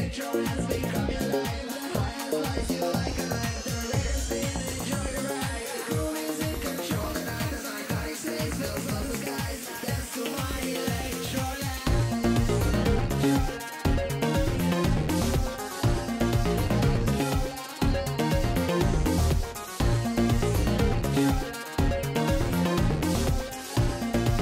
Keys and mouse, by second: 2.3 w, 6.2 w, 10.1 w, 13.1 right click, 13.5 w, 13.9 click, 15.2 right click, 15.8 w, 17.6 click, 17.8 w, 19.6 click, 20.1 w, 21.5-22.5 drag, 23.9-24.4 right drag, 24.3 w.